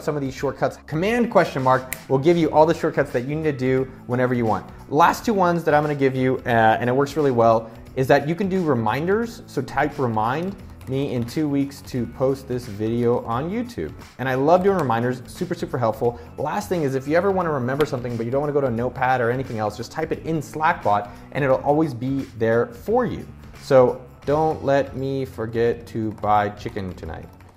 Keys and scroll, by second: 0.8 super+/, 8.7-12.1 typing, 13.5-15.3 typing, 23.4-26.9 typing.